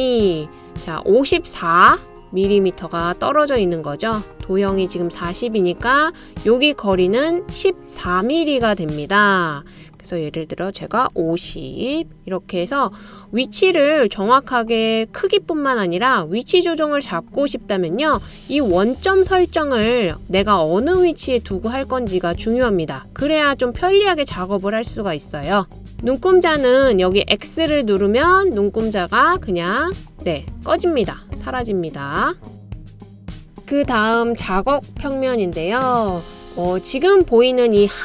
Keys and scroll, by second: 11.7-12.5 typing, 35.5-36.2 typing.